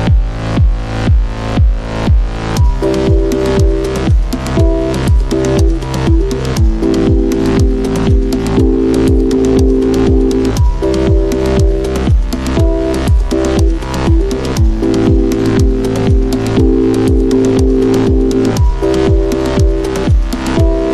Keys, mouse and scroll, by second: 6.5-13.0 drag, 6.5 typing, 13.0-16.4 drag, 16.7 click, 16.7 typing.